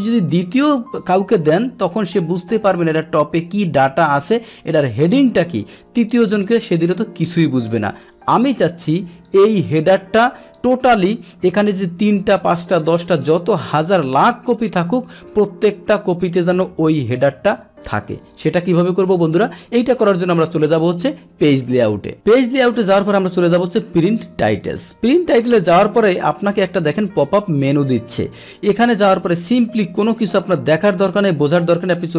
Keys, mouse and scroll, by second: 0.5 click, 5.9 click, 8.4 Escape, 9.2-10.5 drag, 11.4 ctrl+p, 13.0 click, 15.4 Escape, 17.0 ctrl+p, 17.9 ctrl+p, 18.2 Escape, 19.0 click, 19.1 Escape, 21.7 click, 24.4 click, 25.5-27.2 drag.